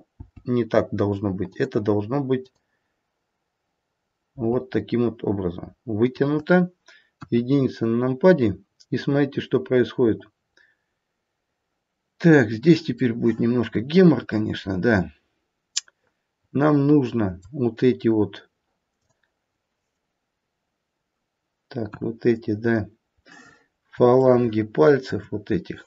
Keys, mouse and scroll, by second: 1.4 g, 2.4 click, 4.1 g, 7.2 KP_1, 9.1-10.1 scroll up 1, 13.1 middle click, 14.6 middle click, 18.9 middle click, 18.9 click, 21.8 KP_1, 23.4-24.3 scroll up 2, 24.3 shift+middle click, 24.3-25.0 scroll up 4.